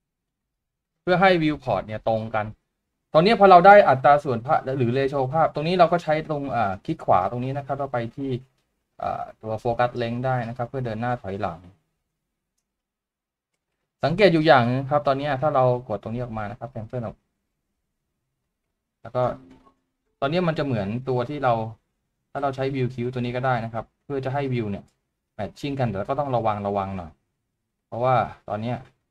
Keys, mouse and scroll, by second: 7.1 right click, 15.2 right click.